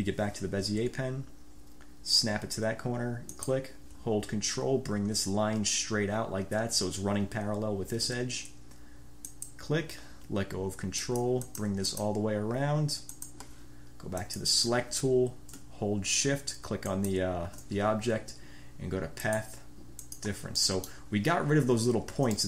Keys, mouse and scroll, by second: 0.0 b, 3.4 click, 9.4 ctrl+click, 11.2-12.0 drag, 12.1 click, 13.2 click, 14.4 click, 17.0 shift+click, 19.4-19.7 scroll up 2, 20.2-20.5 scroll up 2, 20.8 click, 20.9-21.2 scroll up 4, 21.0 drag.